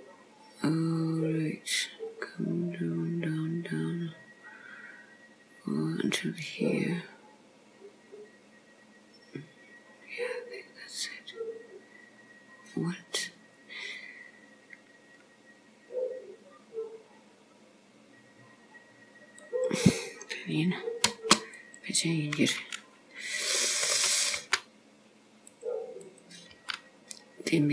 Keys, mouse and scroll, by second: 21.6 click, 23.7 click, 24.5 g, 26.1 click, 26.6 g.